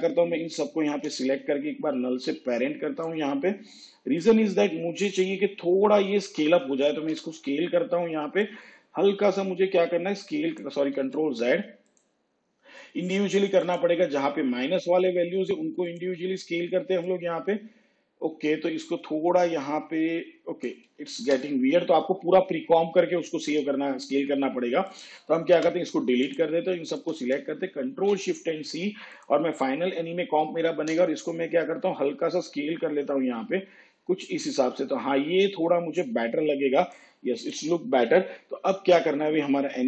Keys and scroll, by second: 7.4 s, 11.3 ctrl+z, 21.5 ctrl+z, 25.9 Delete, 28.2 ctrl+shift+c, 31.2 s.